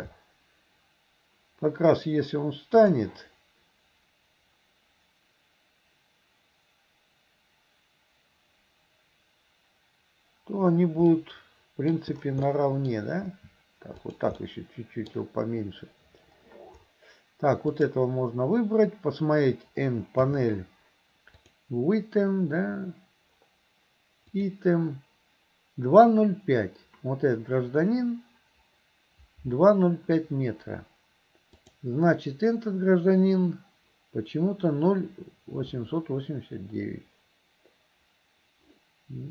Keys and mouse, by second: 11.3 click, 12.5 click, 14.5 click, 17.7 click, 20.3 n, 21.4 click, 24.3 click, 31.6 click.